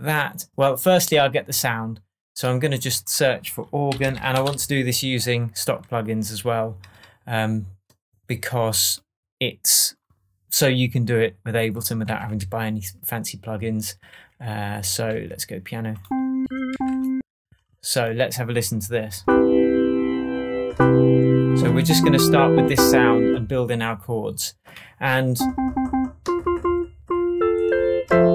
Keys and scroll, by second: 3.6-4.9 typing, 12.0 Down, 14.1 Up, 14.8 Down, 15.1 Right, 16.4 Up, 16.7 Down.